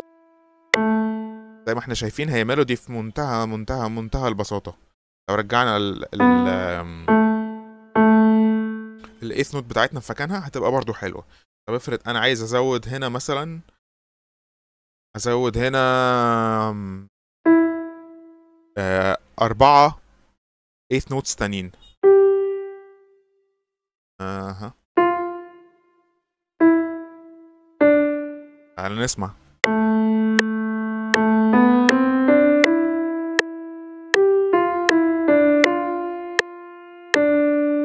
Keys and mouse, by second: 0.8 click, 6.1 click, 7.0 click, 7.8 click, 13.5-16.3 drag, 17.3 click, 21.9 click, 23.2 click, 24.9 click, 26.5 click, 27.7 click, 29.5 click.